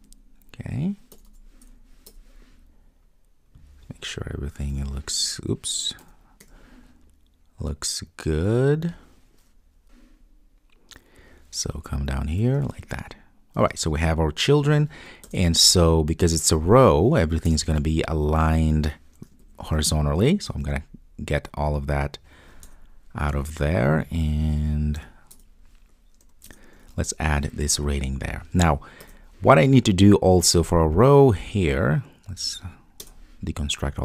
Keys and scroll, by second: 20.6 super+x, 26.9 super+v.